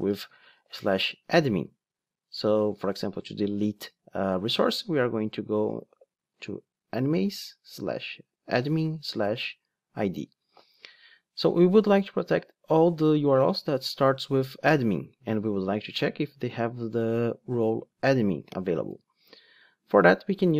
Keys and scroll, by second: 19.0 ctrl+Tab.